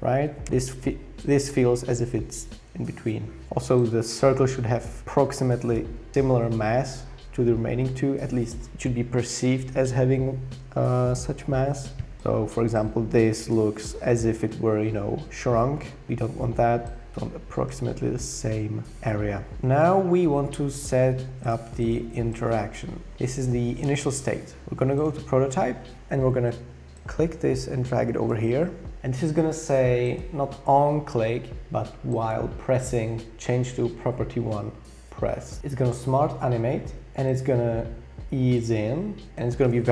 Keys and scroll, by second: 0.4 Page_Up, 0.4 Return.